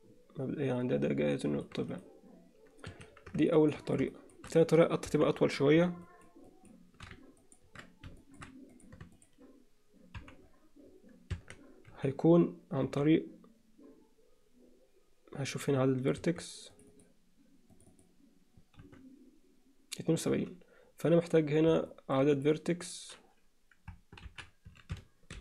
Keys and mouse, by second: 1.9-3.7 right drag, 4.1 shift+middle click, 5.1 KP_1, 6.1 shift+middle click, 6.5 alt+shift+middle click, 7.5 ctrl+alt+middle click, 8.2 alt+shift+middle click, 9.2 shift+click, 10.2 KP_Decimal, 11.5 Tab, 11.9 z, 13.2 z, 16.3 1, 16.9 click, 17.8 click, 18.8 z, 20.3 z, 21.9 middle click, 22.4 click, 24.3 ctrl+l.